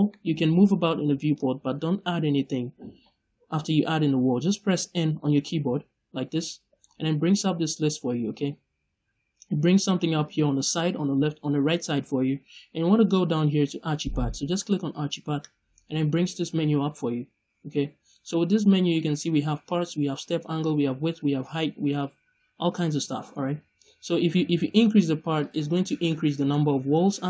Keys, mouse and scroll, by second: 5.4 n, 14.5 click, 25.3 click, 25.9 scroll down 2, 26.0-26.8 middle drag.